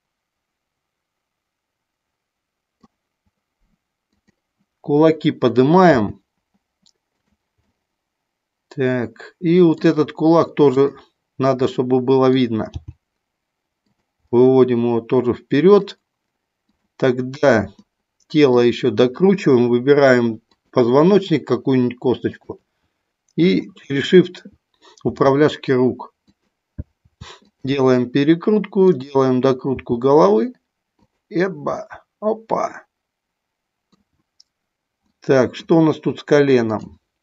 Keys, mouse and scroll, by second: 4.2 click, 5.8 g, 7.7 scroll up 1, 7.8-9.8 middle drag, 10.7 click, 11.6 middle click, 12.7 g, 13.8 click, 14.3-15.8 middle drag, 17.8 middle click, 20.3 shift+click, 22.3 shift+click, 25.1 r, 26.3 click, 27.1 r, 28.8 click, 31.1 click, 31.7-33.9 middle drag, 35.0 middle click, 36.7 click.